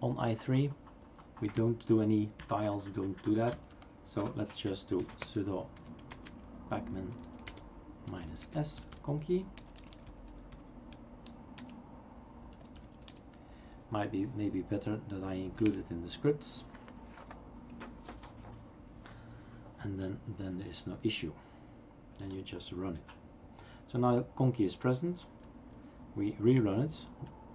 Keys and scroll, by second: 1.6 Up, 2.1 Up, 3.5 Down, 4.9-11.0 typing, 11.5 Return, 12.5-13.4 typing, 15.5 typing, 15.6 Return, 16.6 typing.